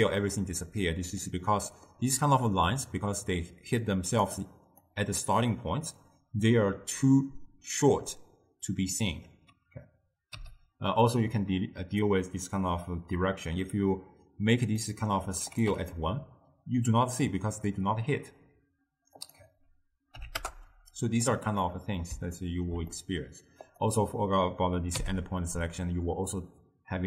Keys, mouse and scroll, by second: 1.7-2.1 middle drag, 2.1-3.8 d, 4.0 click, 4.4 d, 4.6 click, 4.9-5.3 d, 10.5 m, 14.9 ctrl+middle click, 15.6 click, 19.3-21.7 drag, 21.7-23.8 middle drag, 23.8 click, 25.1 m.